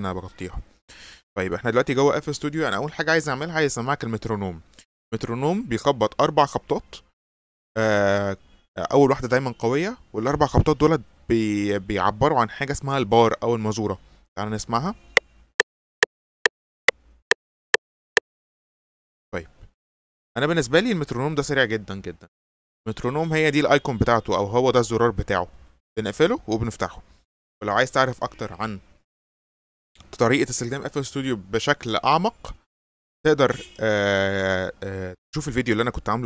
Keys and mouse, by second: 15.1 click, 18.4 click, 25.6 click, 26.2 click.